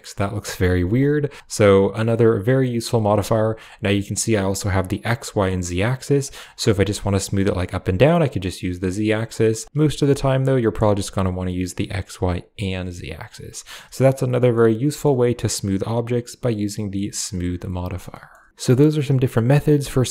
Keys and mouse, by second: 2.0 click, 2.6 click, 4.7 click, 5.6 click, 7.6 click, 8.0 click, 8.4 click, 9.2 middle click, 11.5 click, 12.0 click, 14.4-14.9 middle drag, 16.5 click, 16.9 click, 17.2 click, 18.0 middle drag, 18.3 shift+middle click.